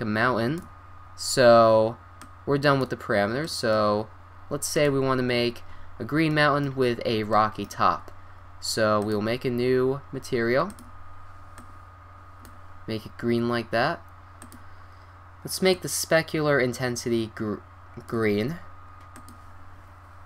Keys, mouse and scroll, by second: 6.5-10.0 middle drag, 6.6 click, 10.0-19.1 drag.